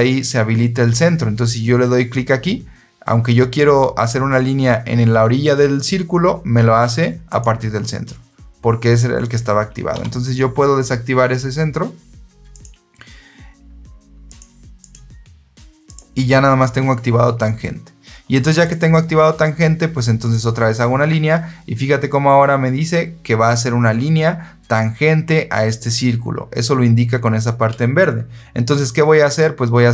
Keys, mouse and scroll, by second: 7.2 click, 9.8 Escape, 12.4 click, 14.2 click, 14.7 click, 15.7 click, 18.5 click, 20.2 click.